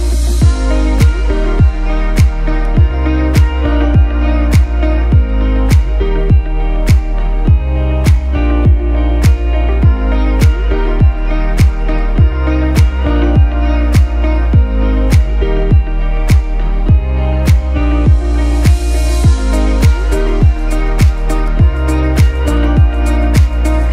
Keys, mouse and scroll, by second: 1.2 Down, 3.1 click, 3.4 scroll up 1, 3.7-4.7 typing, 4.5 click, 4.9 click, 5.8 click, 16.3 alt+shift+click, 18.9 shift+click, 19.1 right click, 19.9 click.